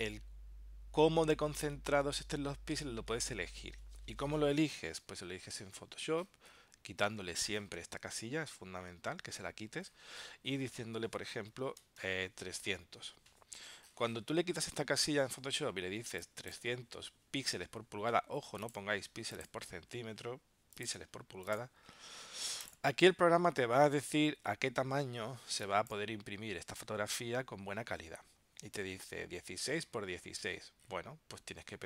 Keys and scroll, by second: 5.1 super+Tab.